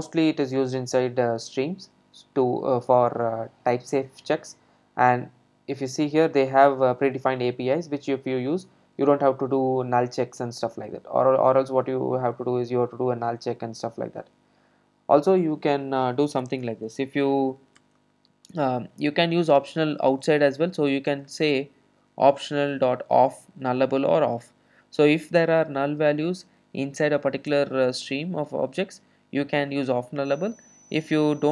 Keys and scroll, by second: 27.5 Return.